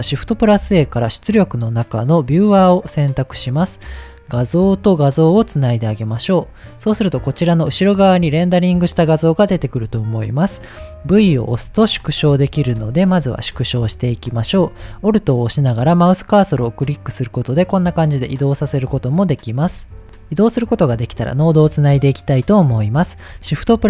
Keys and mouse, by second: 0.3 shift+a, 4.5-5.5 drag, 11.5 v, 12.5 v, 13.3 v, 16.2-19.5 alt+middle drag, 23.5 shift+a.